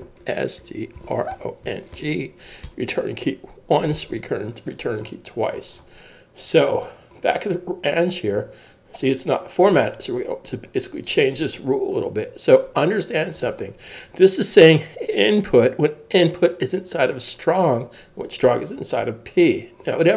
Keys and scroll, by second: 0.0-2.5 typing, 2.6 Return.